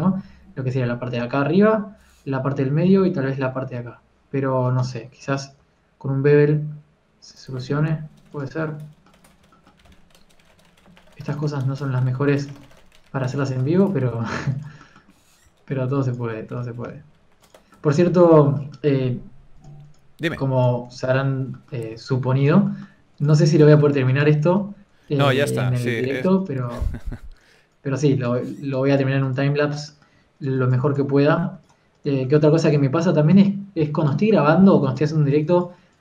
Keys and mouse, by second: 5.7 Tab, 6.5 ctrl+KP_Enter, 6.5 ctrl+b, 10.7 a, 10.7 a, 10.7 s, 12.2 Tab, 13.5 Tab, 15.4 ctrl+r, 16.3 s, 17.5 s, 20.5 click, 21.4-22.4 drag, 22.8 g, 23.0 f, 23.9 click, 23.9 f, 25.5 ctrl+z, 25.7 ctrl+z, 28.1 f, 28.7 f, 31.3 f, 33.2 ctrl+z, 33.6 f, 34.4 KP_3, 35.0 f, 35.8 f.